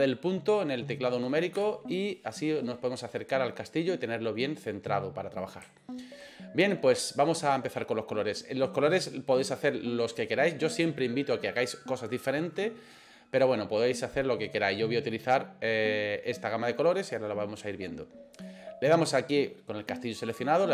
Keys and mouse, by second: 1.6 KP_Decimal, 3.1-5.4 middle drag, 5.8 shift+middle click, 18.4 click.